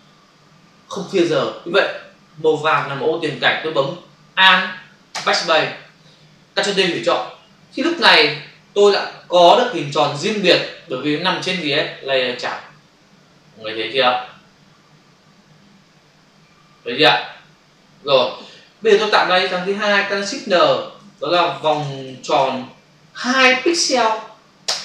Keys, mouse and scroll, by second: 5.1 alt+BackSpace, 6.9 ctrl+d, 7.9 v, 9.5 click, 20.4 ctrl+shift+n, 21.1-23.1 typing, 24.6 Return.